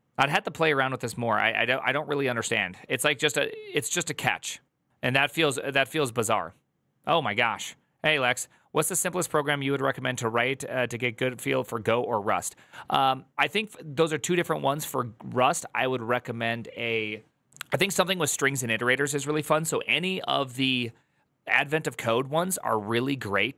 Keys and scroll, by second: 4.9 alt+[.